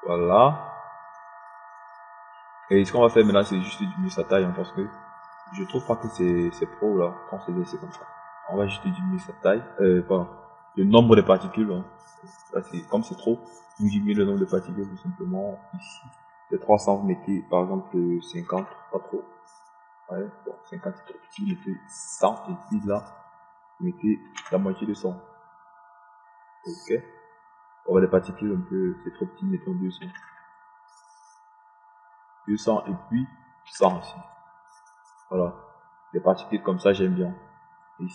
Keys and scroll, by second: 19.9 Home, 19.9 KP_5, 20.2 KP_0, 22.9 KP_1, 23.2 KP_0, 25.7 KP_5, 26.0 KP_0, 31.6 2, 32.0 0, 35.3 1, 35.5 0.